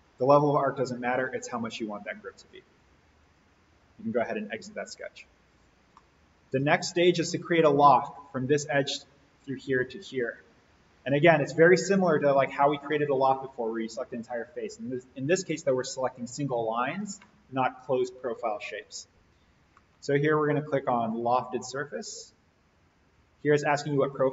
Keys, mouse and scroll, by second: 2.4 click, 5.3 alt+v, 6.0-6.5 middle click, 6.8 click, 21.2 click.